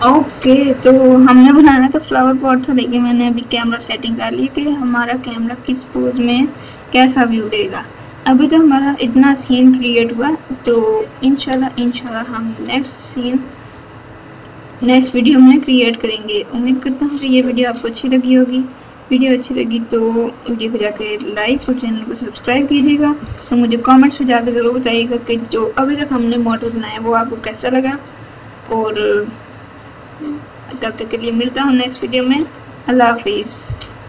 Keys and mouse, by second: 17.0 click.